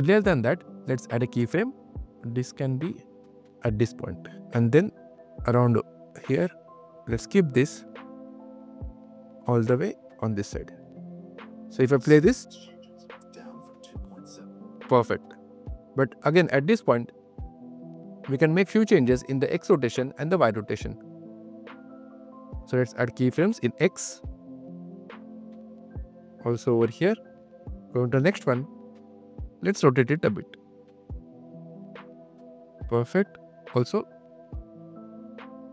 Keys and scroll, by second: 11.7 space, 12.2 q, 14.5 space, 14.9 q, 21.2 super+q, 21.2 super+z, 21.8 q.